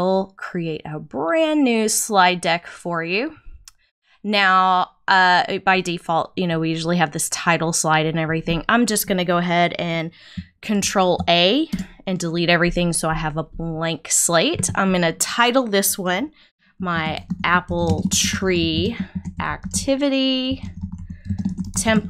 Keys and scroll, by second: 10.8 super+a, 11.7 super+BackSpace, 12.2 BackSpace, 16.9-20.1 typing, 21.2-22.0 typing.